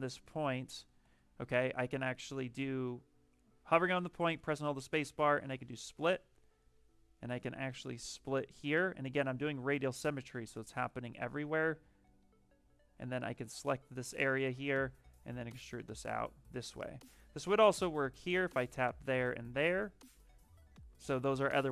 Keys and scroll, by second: 0.1 shift+d, 0.9 space.